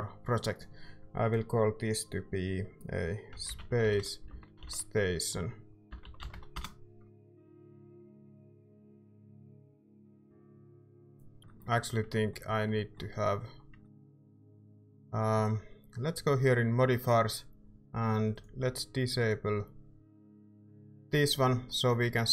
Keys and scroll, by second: 3.1-6.8 typing, 10.9 typing, 11.4 ctrl+s, 11.4 Tab.